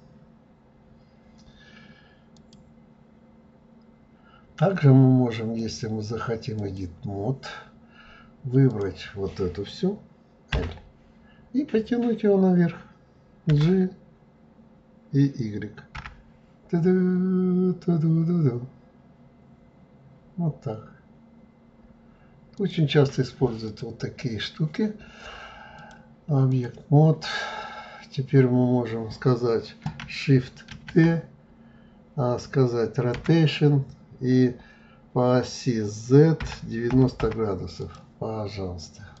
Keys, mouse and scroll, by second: 2.4 click, 5.6-8.6 drag, 8.7 click, 10.5 l, 13.5 g, 23.7 click, 25.8-28.8 drag, 30.7 shift+d, 38.5-39.2 scroll down 3.